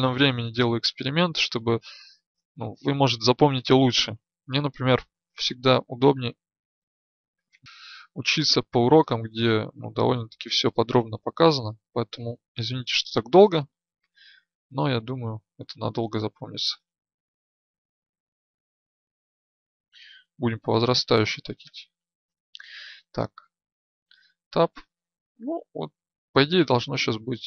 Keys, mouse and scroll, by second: 5.4 Tab, 7.6 right click, 17.6 right click, 19.2-24.1 drag, 24.1 Tab.